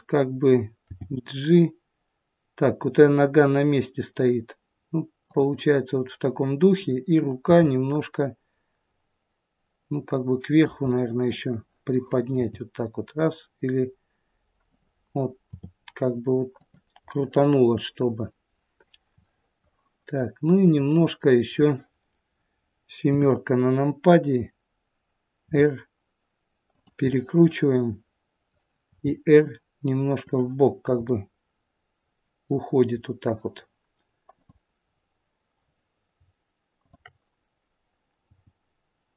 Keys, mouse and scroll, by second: 0.8 g, 6.7 click, 7.4 g, 10.9 middle click, 12.4 g, 15.5 r, 17.1 middle click, 19.2 middle click, 20.7 click, 21.5 middle click, 23.1 KP_7, 25.4 r, 27.1 middle click, 28.9 r, 31.1 middle click, 34.3 click, 36.8 shift+click, 38.2 g.